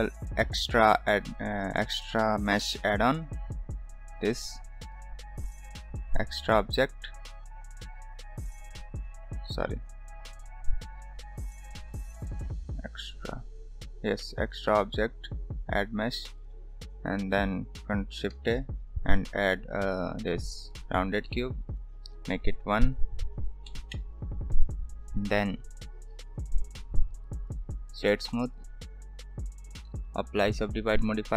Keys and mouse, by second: 8.7-9.7 drag, 18.3 shift+a, 21.6 click, 22.9-24.4 drag, 26.3 shift+a, 27.8-28.6 right drag, 29.8 drag, 30.5-31.3 drag.